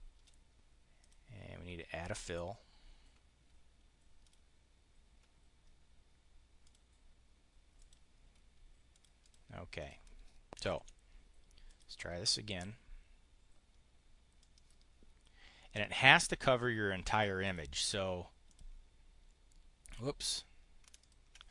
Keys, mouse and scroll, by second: 0.9 click, 4.1 click, 6.5 click, 7.7 click, 8.8 click, 9.6 click, 10.6 Delete, 11.5 click, 14.3-16.1 drag, 17.0 click, 18.3 click, 20.8 ctrl+click.